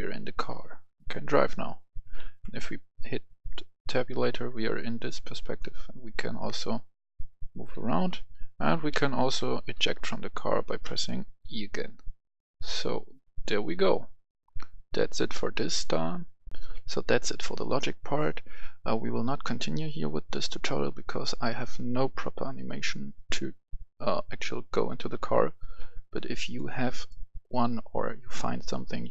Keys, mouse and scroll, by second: 0.8 click, 0.8-1.1 typing, 2.2 Tab, 2.7-3.3 typing, 4.5-5.3 typing, 7.1-7.7 typing, 7.9 Tab, 8.9-9.4 typing, 10.9 k, 16.5 click, 16.5 F10, 26.0 F10, 26.4 click, 27.4-29.1 right drag.